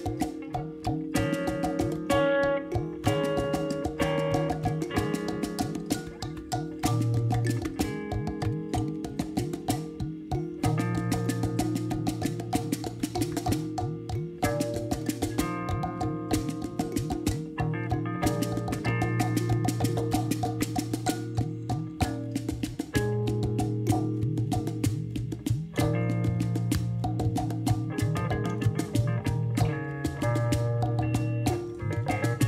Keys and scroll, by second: 1.5 g, 8.5 z, 20.2 alt+a, 20.7 shift+z, 23.1 Tab, 23.5 alt+a.